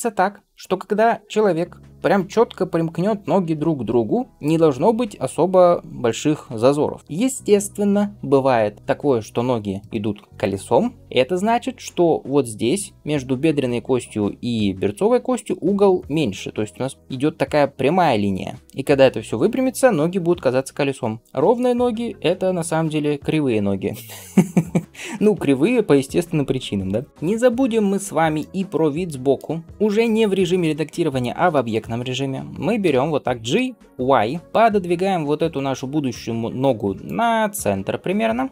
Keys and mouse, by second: 32.7 g.